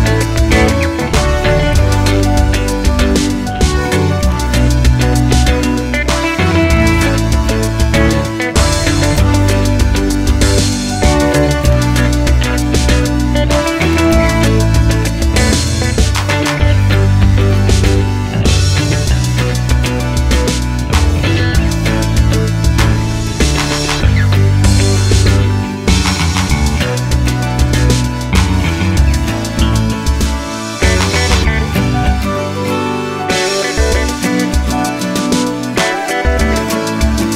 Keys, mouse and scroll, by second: 5.5 Tab, 6.8 KP_7, 7.2 scroll down 1, 7.3 shift+a, 8.7-12.5 middle drag, 9.2 scroll up 1, 10.4 g, 12.5 shift+click, 12.7-15.1 middle drag, 12.8 Tab, 15.1 click, 15.6 g, 16.4 click, 16.5-18.6 middle drag, 16.9 KP_3, 17.5 g, 18.6 click, 19.2 z, 19.6 click, 20.1 g, 21.3 click, 21.4-23.1 middle drag, 22.4 KP_3, 23.1 click, 24.1 g, 25.8 click, 27.2 g, 29.2 click, 29.9 g, 31.5-35.8 middle drag, 31.7 Tab, 32.1 scroll down 1, 32.3 z, 35.8 click, 36.3 click, 37.2-37.3 drag.